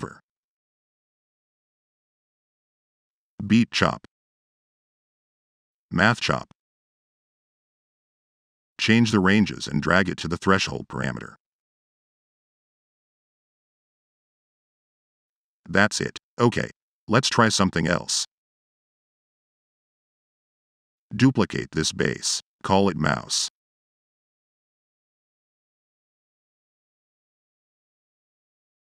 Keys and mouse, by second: 2.9 click, 3.8 click, 4.4 click, 4.9 click, 5.3 right click, 8.1 click, 8.6 click, 8.9 click, 10.1 click, 10.7 click, 11.2 drag, 12.3 click, 12.7-13.9 drag, 17.0 drag, 20.1 right click, 20.7 click, 21.2 click, 21.5 click, 21.8 ctrl+c, 22.1 ctrl+v, 22.3 click, 22.9 click, 25.0-25.6 drag, 26.0-26.3 drag, 26.7-27.0 drag, 27.3 click, 27.9-28.2 drag.